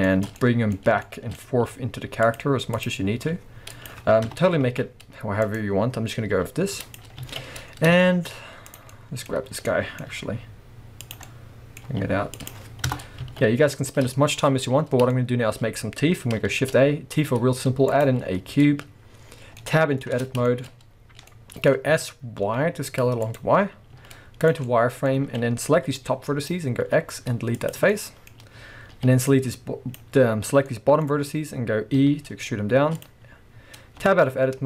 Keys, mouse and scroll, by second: 0.0-0.4 shift+scroll up 1, 0.7 scroll up 1, 1.7 g, 2.7 click, 3.2 g, 3.9 click, 4.3 KP_0, 4.6 alt+a, 5.4 click, 5.9 scroll down 1, 6.3 g, 7.0 click, 7.1 scroll down 1, 7.2 alt+a, 8.0 shift+middle click, 8.7 click, 8.9-11.1 middle drag, 9.3-9.7 scroll up 2, 10.2 g, 11.1 click, 11.2-12.5 middle drag, 11.8 g, 12.5 click, 12.8 KP_0, 13.2 alt+a, 13.7-14.1 scroll up 1, 14.1-23.3 shift+middle drag, 14.7-15.1 scroll up 1, 16.5 shift+a, 18.2-19.6 scroll down 2, 20.2 Tab, 20.7-21.3 scroll up 2, 21.9 s, 23.3 click, 23.9 z, 24.6 scroll up 1, 24.8-33.0 middle drag, 25.2 alt+a, 25.8 b, 26.8 x, 29.0 b, 31.1-32.0 scroll up 2, 32.0 e, 33.0 click, 34.0 Tab, 34.2 middle click.